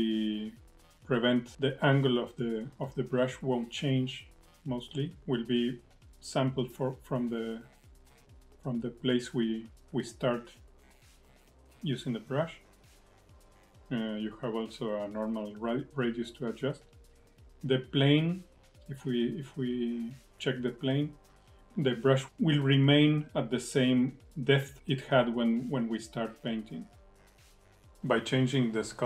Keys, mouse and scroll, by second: 0.7-1.3 scroll down 1, 1.3 click, 2.1 click, 3.5 click, 5.0 click, 7.3 KP_1, 17.3 f, 21.5 click.